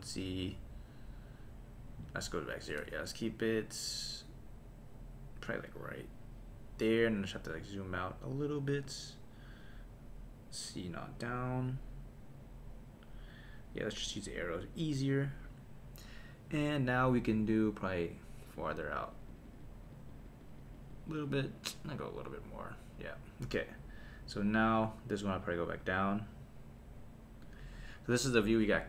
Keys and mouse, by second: 0.5-1.9 drag, 2.0 click, 3.5-6.5 drag, 7.1-8.9 drag, 9.6-13.3 drag, 14.1 click, 14.6 click, 18.5 click, 18.8 click, 18.9 click, 19.1 click, 19.3 click, 19.4 click, 19.6 click, 19.9 click, 20.1 click, 20.2 click, 20.4 click, 20.6 click, 20.7 click, 20.9 click, 21.1 click, 21.2 click, 21.7-23.0 drag, 25.4 click, 25.8 click, 26.1 click, 27.4 click, 28.4 click.